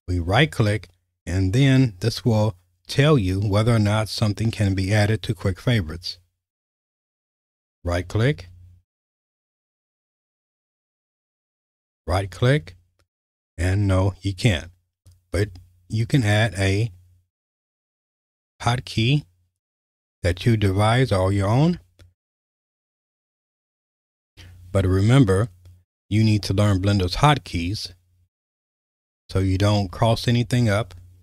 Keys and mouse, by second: 0.0-6.1 right drag, 7.9-9.4 right drag, 11.3-30.7 right drag.